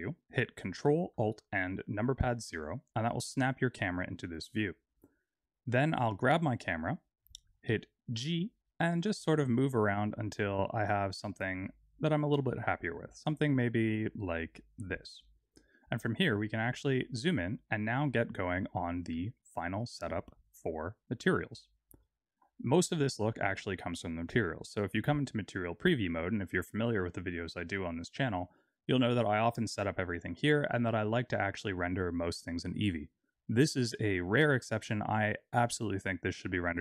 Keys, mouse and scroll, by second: 2.3 ctrl+alt+KP_0, 5.0 click, 8.7 g, 15.4 click, 16.3-16.9 scroll up 4, 16.9-18.5 scroll down 2, 21.9 z.